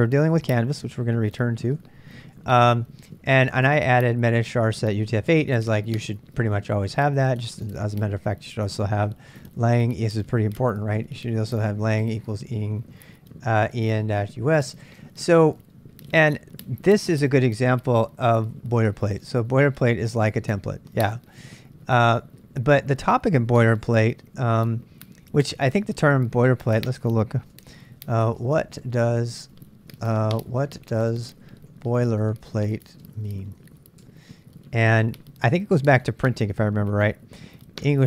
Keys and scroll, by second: 0.0-4.3 typing, 2.5 Return, 5.7-8.2 typing, 9.3-16.2 typing, 21.2 ctrl+[, 21.4-22.0 k, 26.5 ctrl+[, 26.6 ctrl+j, 27.3 ctrl+a, 27.5-34.5 typing, 35.7-36.7 typing.